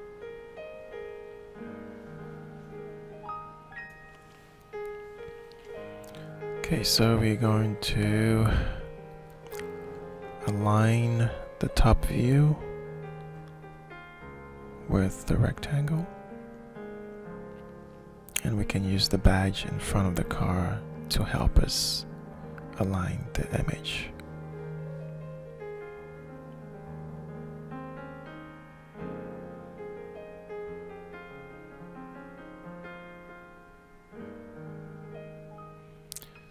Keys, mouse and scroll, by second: 1.4 click, 2.4 shift+middle click, 3.4-4.6 ctrl+drag, 5.5-9.0 drag, 9.5-10.8 shift+middle drag, 11.2 middle click, 11.9 click, 12.7 ctrl+z, 13.0 ctrl+z, 14.0-15.2 drag, 15.7 scroll down 2, 16.5-18.5 alt+shift+middle drag, 18.5-21.4 drag, 21.8 shift+middle click, 23.0-27.3 drag, 27.9-31.9 middle drag, 32.0 middle click, 32.6 alt+shift+middle click, 34.2 alt+shift+middle click, 34.8-36.5 middle drag.